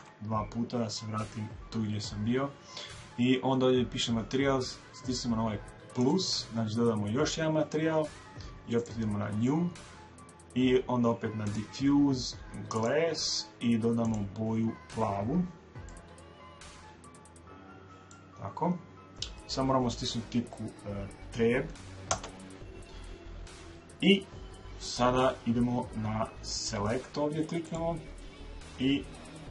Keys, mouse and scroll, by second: 6.0 click, 11.4 click, 22.0 Tab, 27.6 click.